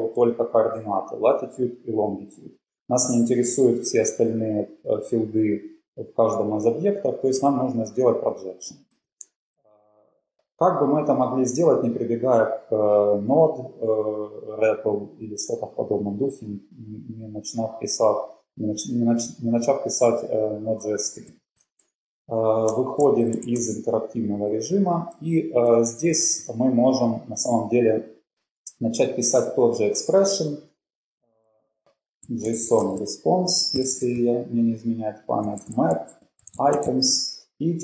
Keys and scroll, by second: 21.3 shift+;, 23.0 Return, 23.2-23.8 typing.